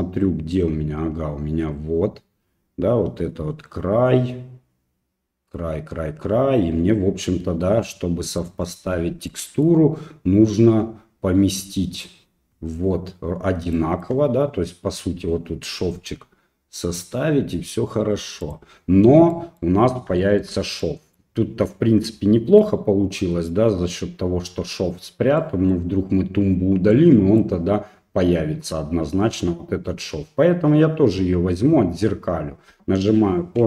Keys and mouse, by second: 9.3 middle click, 13.8 shift+middle click, 16.0 g, 19.4 middle click, 20.2 shift+middle click, 20.8 middle click, 21.7 middle click, 25.5 middle click, 26.9 middle click.